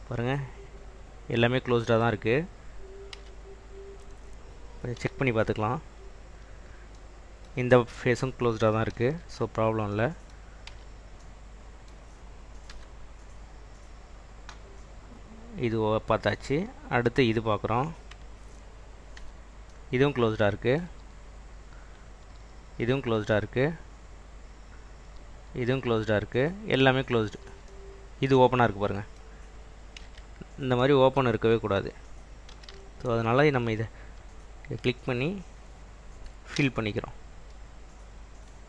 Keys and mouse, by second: 3.3 Tab, 3.9 click, 5.1 l, 6.1 click, 9.1 ctrl+z, 10.8 Tab, 12.8 /, 17.2 click, 19.3 /, 21.1 /, 22.3 /, 23.3 /, 25.1 /, 25.9 /, 27.3 /, 30.1 Tab, 32.6 1, 33.6 alt+click, 36.7 f.